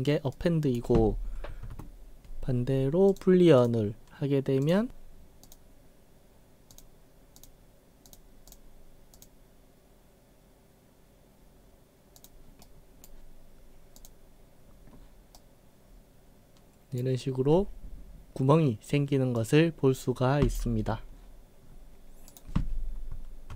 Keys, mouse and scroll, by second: 0.3-0.8 right drag, 1.7 ctrl+z, 3.1 click, 3.6 click, 4.6 click, 5.5 click, 6.7 click, 7.4 click, 8.1 click, 8.5 click, 9.1 click, 12.2 click, 12.7 right click, 14.0 click, 15.4-17.0 right drag, 19.4-20.6 right drag, 21.6 scroll up 2, 22.4 click.